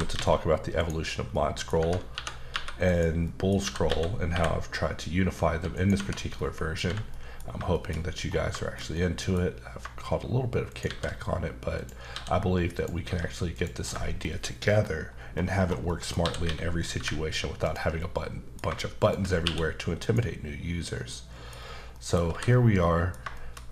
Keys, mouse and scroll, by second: 0.8 right click, 1.3 middle click, 1.8 Tab, 2.1-2.5 typing, 2.9 click, 3.2 middle click, 3.6-4.3 typing, 5.7 click, 5.9 Tab, 6.9 h, 7.1 middle click, 7.4 scroll down 1, 7.7 shift+middle click, 8.2-8.5 scroll down 1, 8.6 shift+middle click, 9.7 scroll up 2, 10.7 shift+right click, 10.8 shift+a, 11.7 click, 12.1 s, 12.7 click, 13.0 s, 13.5 click, 13.8 KP_5, 15.2-15.8 scroll up 3, 15.8 middle click, 16.2-17.0 typing, 17.6 click, 18.0 middle click, 19.0 shift+click, 19.2 click, 19.4 q, 20.0 click, 21.1 middle click, 21.5-21.9 scroll down 3, 21.9 middle click, 22.3 h, 22.6 scroll down 1, 22.8 middle click, 23.3 shift+middle click.